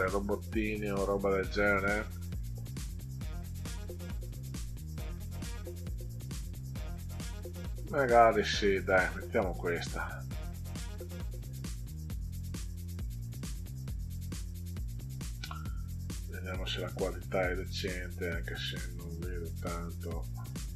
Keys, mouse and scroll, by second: 2.0-2.4 scroll down 4, 3.8 scroll up 2, 4.5 middle click, 8.4 right click, 9.5 click, 18.0 scroll down 2, 19.2 scroll down 2, 20.6 middle click.